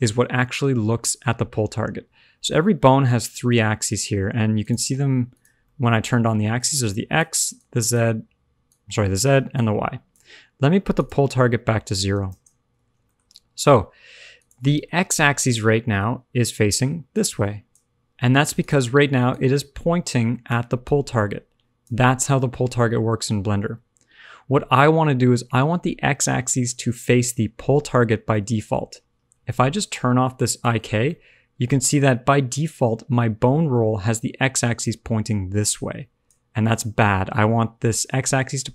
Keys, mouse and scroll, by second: 0.3 middle click, 4.5 click, 5.3 click, 5.6 middle click, 6.1-10.1 typing, 6.5 click, 7.9 click, 8.6 click, 9.6 click, 10.9 click, 13.0 shift+middle click, 13.9 middle click, 14.3 click, 14.7 shift+middle click, 15.1 middle click, 15.7 shift+middle click, 16.7 d, 17.1 click, 17.9 d, 18.5 click, 18.9 d, 19.3 click, 20.5-21.9 typing, 20.8 click, 28.1 scroll down 1, 28.3 middle click, 30.4 click, 31.0 middle click, 31.7 shift+middle click, 32.3 middle click, 33.7 d, 34.1 click, 34.9 d, 36.2 click, 36.2 d, 37.3 scroll down 2, 37.5-38.1 scroll up 2.